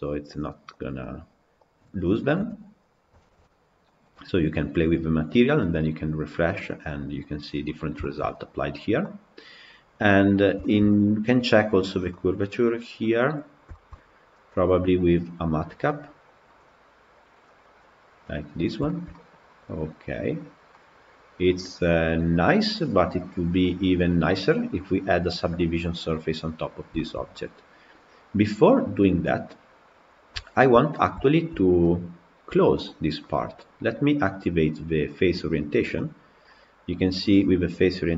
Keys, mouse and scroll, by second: 0.3 click, 0.6 click, 1.0 click, 1.5 click, 2.2 KP_Decimal, 3.0-6.2 shift+middle drag, 7.6 scroll down 2, 7.8-8.4 shift+middle drag, 8.4-8.8 scroll up 2, 8.8-9.5 middle drag, 9.5 scroll up 2, 10.1 scroll down 2, 10.4 shift+middle drag, 10.6-11.4 scroll up 1, 11.4 click, 11.9-13.3 middle drag, 13.3 scroll down 2, 13.5-16.3 shift+middle drag, 16.3-18.3 drag, 18.7-20.2 shift+middle drag, 20.2-20.5 scroll up 1, 20.5-23.6 middle drag, 25.8-26.8 scroll down 1, 26.8-29.6 shift+middle drag, 29.9-30.2 scroll up 1, 30.2 shift+middle click, 30.7 scroll up 1, 31.0-32.0 shift+middle drag, 32.2-35.1 middle drag, 35.1-35.8 drag, 35.8-38.1 middle drag.